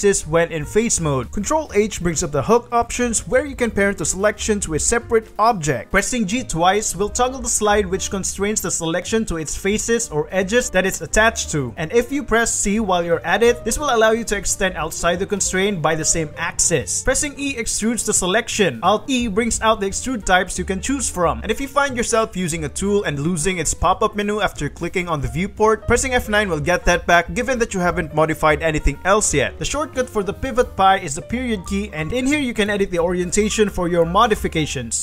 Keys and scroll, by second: 1.6 ctrl+Escape, 2.0 ctrl+h, 3.3 ctrl+h, 4.5 g, 6.4 g, 7.7 g, 9.4 shift+g, 11.8 c, 13.7 g, 14.5 c, 15.5 shift+g, 16.1 c, 16.9 e, 17.4 ctrl+shift+z, 18.0 shift+e, 18.9 alt+e, 26.2 F9, 32.8 r, 34.0 s.